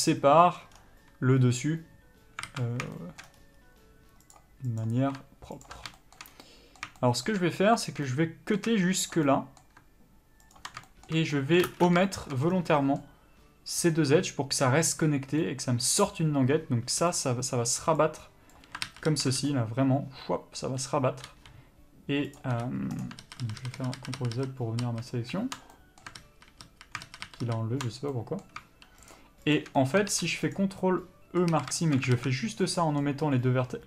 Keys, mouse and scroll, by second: 0.1 ctrl+e, 0.2 middle click, 1.0-2.7 scroll down 1, 2.7 alt+a, 3.2 shift+middle click, 3.6 scroll up 1, 4.5 click, 5.9 ctrl+click, 6.2 shift+middle click, 6.5 scroll down 1, 6.7 middle click, 7.2 shift+middle click, 7.7 scroll up 1, 8.3 middle click, 9.4 shift+click, 9.5 middle click, 10.8 ctrl+click, 11.1 shift+middle click, 11.9 ctrl+space, 11.9-17.4 middle drag, 12.7 scroll down 1, 17.4-22.8 drag, 18.2 d, 18.8 d, 19.2 ctrl+z, 20.9 d, 21.5 n, 22.8 n, 23.2 click, 23.5 ctrl+z, 26.0-29.4 middle drag, 26.5 ctrl+z, 27.3 ctrl+shift+z, 29.4 shift+click, 30.0-32.5 middle drag, 30.8 ctrl+e, 31.8 a, 32.4 alt+a, 33.1-33.8 middle drag.